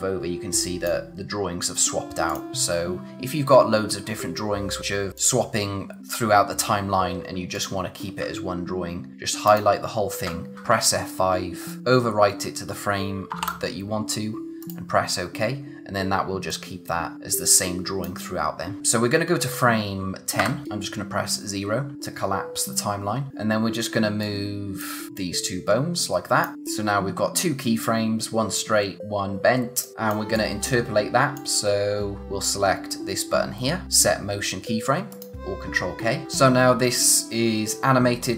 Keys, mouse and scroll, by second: 5.1 click, 9.4 shift+click, 10.5 F5, 11.7 click, 14.6 click, 16.5 click, 20.4 0, 23.3 click, 35.1 click.